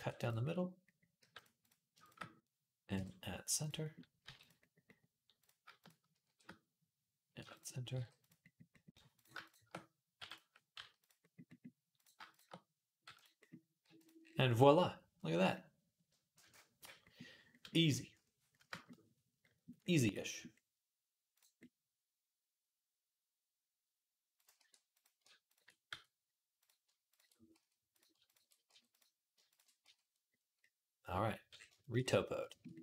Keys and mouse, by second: 1.0 g, 1.4 click, 2.7 m, 4.0 g, 5.6 shift+click, 5.7 shift+middle click, 6.0 shift+r, 7.2 m, 7.7 g, 9.4-12.1 middle drag, 9.9 m, 10.5 g, 12.1 shift+click, 12.2-26.9 middle drag, 12.8 m, 13.6 g, 24.4 e, 25.7 f, 26.9 ctrl+click, 27.0 ctrl+middle click, 27.3 f, 27.7 click, 27.8 ctrl+middle click, 28.1 ctrl+click, 28.2 middle click, 28.5 f, 28.7 click, 28.8 middle click, 29.1 shift+a, 29.2 shift+click, 29.3-32.8 shift+middle drag, 29.6 f.